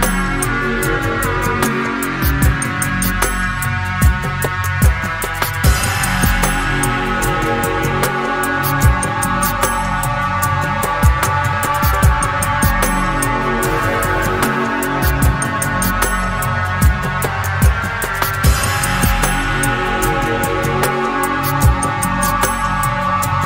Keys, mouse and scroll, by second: 0.4 click, 1.5-2.8 drag, 3.9-5.4 drag, 5.7 click, 6.6-8.9 drag, 9.0 middle click, 10.2 middle click, 10.8 click, 11.6-12.9 drag, 13.5-14.8 drag, 16.0 click, 16.7 click, 17.4 click, 18.7 click, 20.1 click, 21.2-22.8 drag, 23.3-23.4 drag.